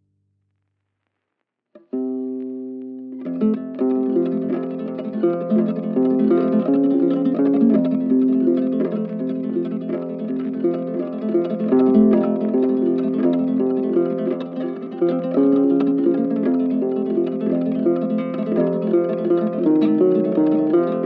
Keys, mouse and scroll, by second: 0.2 middle click, 0.4 click, 0.5-1.0 scroll up 4, 1.0 middle click, 1.6 click, 1.6-2.1 scroll down 3, 2.1 click, 2.3-2.6 ctrl+z, 2.8-3.9 middle drag, 3.9 click, 4.3 middle click, 4.4 Tab, 4.5 click, 15.4 click, 17.9 click, 18.5 typing.